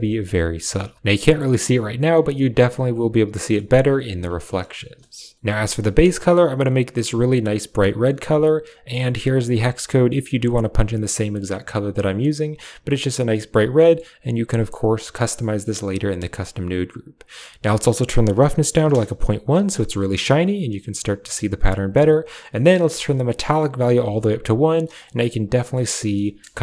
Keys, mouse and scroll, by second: 3.4 middle click, 5.3 ctrl+v, 5.3 middle click, 5.8 click, 7.9 click, 8.6 click, 13.6 middle click, 16.1 middle drag, 17.0-18.8 drag, 22.6-24.0 drag, 25.0 middle click, 25.6 middle click, 26.1 KP_0.